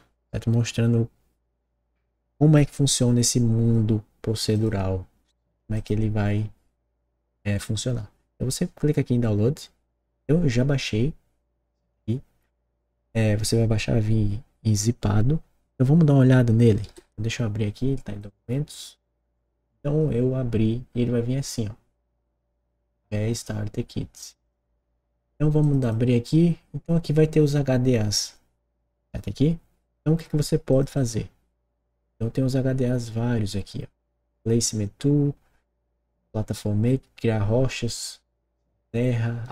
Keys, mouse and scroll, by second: 4.5 click, 5.7 click, 16.8 super+e, 18.2 click, 24.2 click, 24.3 click, 25.6 click, 25.8 click, 30.7 click, 30.9 click.